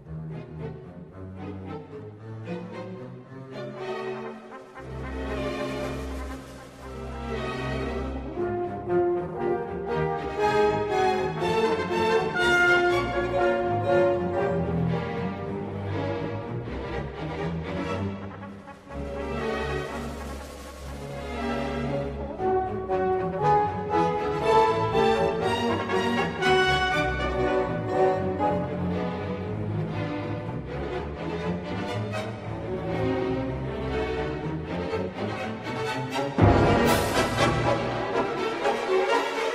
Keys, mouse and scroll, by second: 2.8-5.2 drag, 10.6 Tab, 11.8 1, 13.9 shift+click, 15.3 f, 16.5-17.5 drag, 18.4 x, 20.4 shift+middle click, 21.8 a, 23.4 f, 27.8 k, 34.7 k.